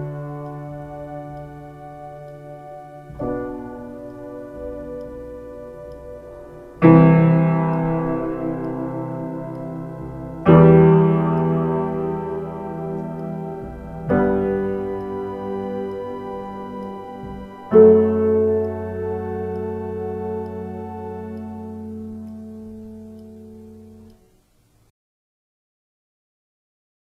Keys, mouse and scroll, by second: 16.5 ctrl+space, 17.8 space, 18.3 x.